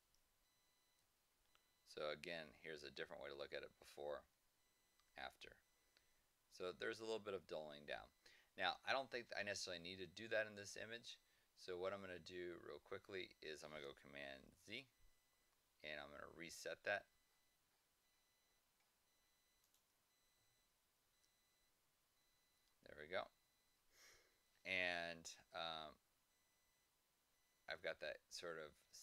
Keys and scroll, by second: 0.9 Left, 4.2 Right, 6.0 Left, 6.7 Right, 14.5 super+z, 21.0 super+z.